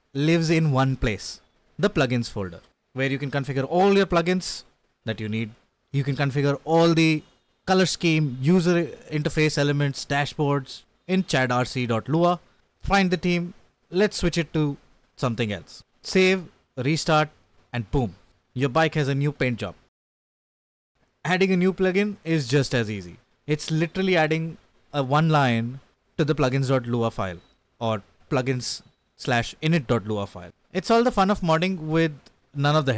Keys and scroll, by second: 0.8 k, 1.2 ctrl+d, 1.6 ctrl+u, 3.2-7.1 typing, 5.3 Return, 8.2-10.4 typing, 12.0 k, 14.5-16.8 typing, 17.2 Escape, 17.5 ctrl+s, 18.3-21.4 typing, 24.5-25.3 typing, 25.8 Escape, 25.9 Up, 26.0 Up, 27.5-31.2 typing, 30.6 shift+Tab, 31.1 Left, 31.6 Escape, 32.4 ctrl+s.